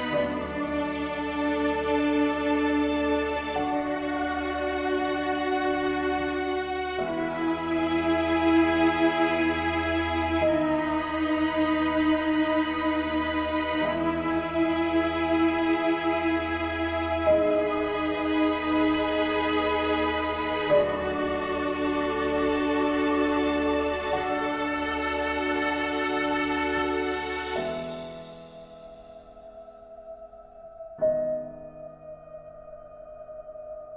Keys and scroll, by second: 2.5 ctrl+z.